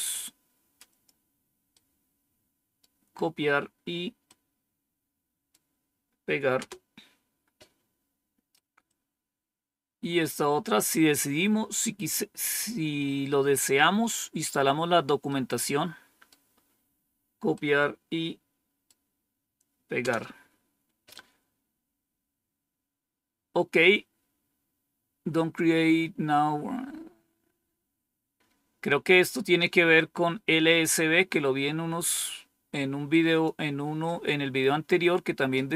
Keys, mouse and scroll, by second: 1.6-2.7 right drag, 4.2-5.4 right drag, 6.5 Return, 8.8-10.7 drag, 15.2-16.2 right drag, 17.4-18.8 right drag, 19.9 Return, 21.8-23.0 scroll down 2, 29.8-33.4 drag.